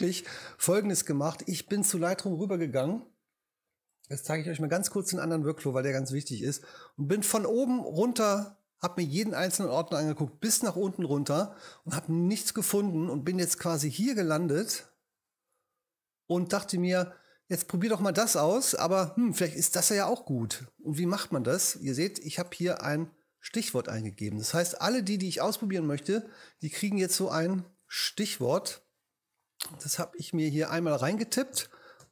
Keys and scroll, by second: 27.2 g.